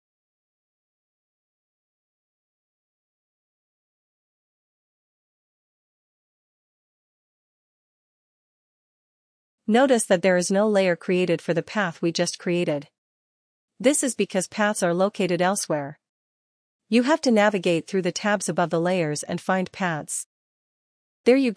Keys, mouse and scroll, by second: 1.5 click, 11.8 click, 15.8-21.5 drag.